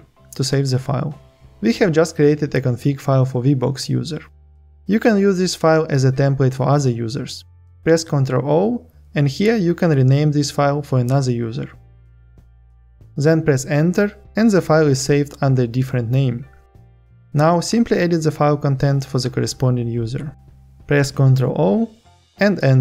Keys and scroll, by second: 7.1 ctrl+o, 20.8 ctrl+o, 22.2 Return.